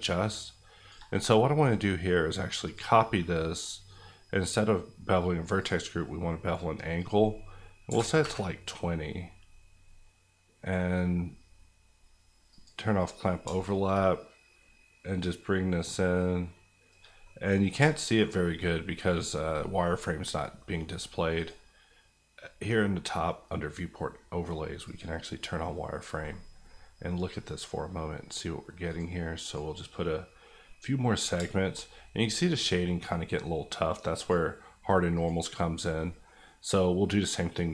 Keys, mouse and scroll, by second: 3.8-5.6 scroll down 1, 5.6 click, 7.8 KP_2, 7.9 KP_0, 8.2 KP_Enter, 12.5-17.0 drag, 17.0 shift+click, 17.2 middle click, 17.5-17.9 scroll up 2, 17.9 shift+middle click, 21.3 click, 26.6 middle click, 28.8 click, 30.6 middle click, 34.2 click, 35.7 scroll down 1, 36.0 middle click.